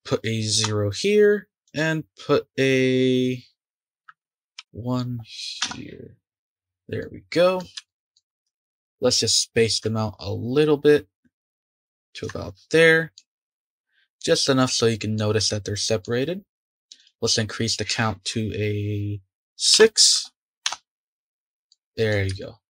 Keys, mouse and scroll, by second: 3.9-6.2 drag, 7.0-8.3 middle drag, 8.3 scroll up 2, 8.5-9.7 shift+middle drag, 9.7-11.7 drag, 12.7-13.4 middle drag, 13.4 scroll down 2, 13.6 click, 13.8-14.2 scroll up 4, 14.2-16.9 middle drag, 16.9-20.0 drag, 21.7-22.6 middle drag.